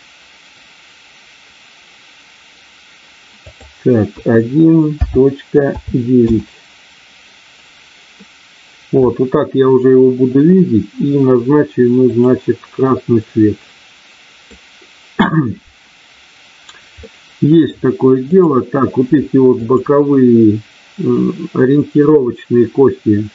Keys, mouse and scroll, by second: 3.3-8.1 drag, 12.1 click, 13.2-14.4 middle drag, 17.0 middle click, 18.3 click, 19.7 shift+click.